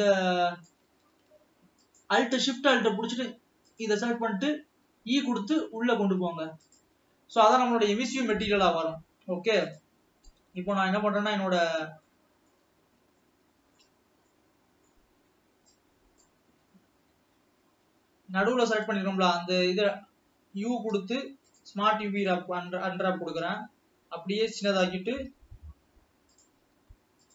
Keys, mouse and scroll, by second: 0.0-1.1 drag, 1.1 alt+a, 2.1 alt+shift+click, 2.7 alt+a, 3.8 alt+click, 4.9 e, 9.8 click, 12.1-14.2 middle drag, 14.2 scroll down 1, 14.4-15.7 middle drag, 15.7 click, 16.5-17.0 scroll up 1, 22.5 u, 23.6 s, 25.6 g, 26.8 s.